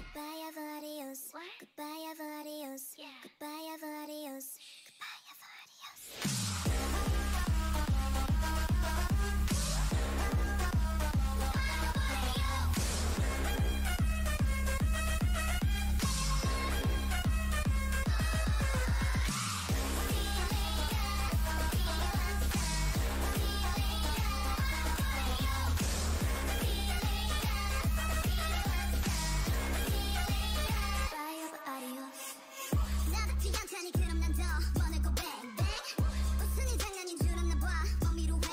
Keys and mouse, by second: 0.3 Tab, 2.0 Tab, 3.1 KP_7, 4.0 Tab, 5.2-6.7 drag, 5.5 g, 6.7 g, 7.3 g, 8.2 middle click, 8.7 middle click, 9.7 click, 11.8 g, 12.1-13.6 drag, 13.0 Tab, 14.9 Tab, 17.3 click, 17.8 KP_7, 20.2 g, 22.3 g, 25.6 click, 26.4 g, 27.2 Tab, 28.2 Tab, 28.9-31.6 drag, 29.7 g, 31.6 g, 33.7 ctrl+z, 34.3 g, 35.6 g, 36.2 Tab, 37.8 middle click, 38.3 Tab.